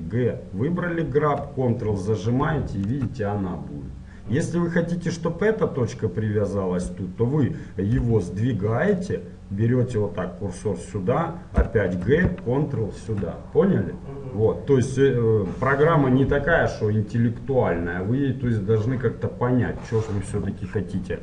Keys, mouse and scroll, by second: 8.1 g, 11.7 g, 20.2-21.2 middle drag, 20.2-21.2 scroll down 1.